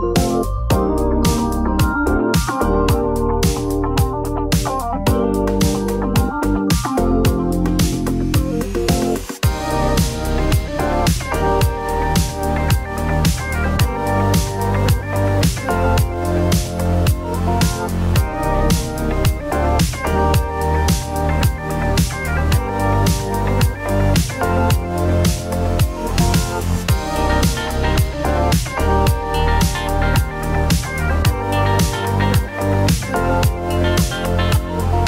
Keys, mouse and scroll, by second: 2.3 click, 3.3 click, 3.4 click, 4.7 click, 5.7 middle click, 6.1 Tab, 6.6 shift+click, 9.4 alt+a, 13.3 shift+click, 14.2 g, 14.5 z, 21.6 click, 22.4 click, 23.8 l, 25.1 ctrl+v, 28.3 click, 30.0 middle click, 31.1 click, 32.6 g, 33.0 x.